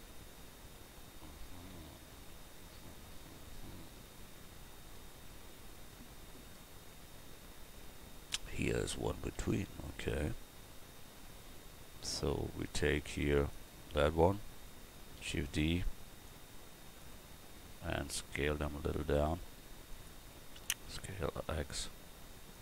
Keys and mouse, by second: 12.8 Tab, 15.2 shift+d, 17.6 s, 19.3 s, 20.9 s.